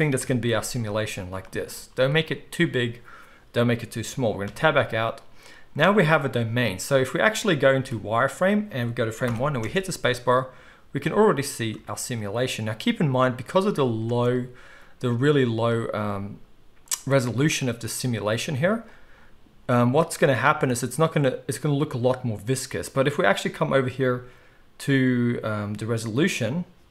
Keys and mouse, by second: 0.2 KP_1, 0.6 z, 1.8 z, 4.6 Tab, 7.8 z, 9.3 shift+Left, 9.4-17.5 middle drag, 9.6 space, 14.0 space, 16.0 z, 17.5 click, 17.6-18.7 middle drag, 18.7-19.1 drag, 19.1-26.9 middle drag.